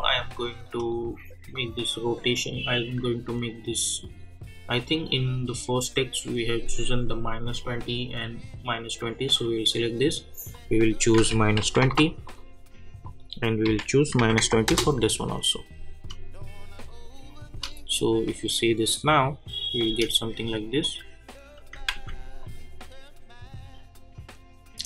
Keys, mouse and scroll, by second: 0.8 click, 5.4 click, 9.4 click, 11.1 -, 12.2 click, 13.6 -, 14.7 \, 16.8 click, 17.5 space, 19.8 space, 20.8 click, 21.9 ctrl+z, 22.4-24.8 drag.